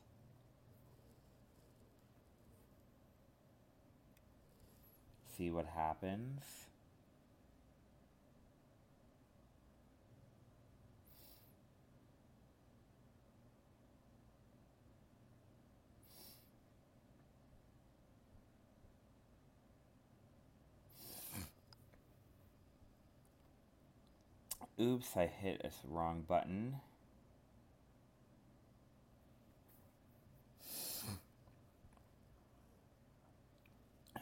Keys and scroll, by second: 5.4 alt+space, 9.1 ctrl+z, 17.8 ctrl+alt+z, 18.3 alt+space, 19.4 ctrl+alt+z.